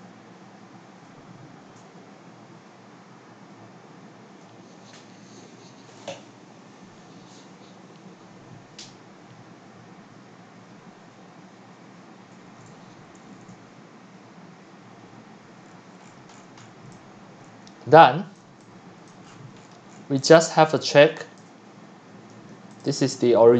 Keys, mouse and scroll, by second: 2.0 click, 15.6-16.9 scroll down 17, 16.9-18.0 typing, 17.0 click, 19.1 click, 19.3-20.3 scroll down 19, 20.1-22.3 typing, 21.4 click, 22.8 click, 23.0 click, 23.4 w.